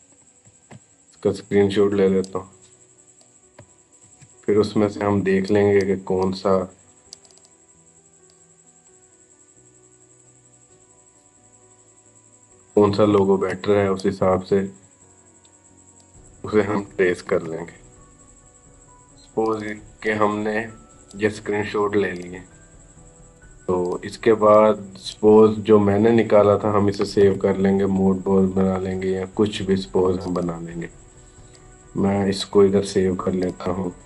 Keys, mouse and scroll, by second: 0.2 shift+super+s, 2.3 click, 3.9 ctrl+v, 5.3-7.1 drag, 8.7 scroll down 1, 10.0 click, 12.9 shift+super+s, 15.2 click, 17.1 ctrl+v, 18.5-27.1 drag, 27.1 ctrl+alt+s, 29.0-30.0 scroll down 1, 30.0 click.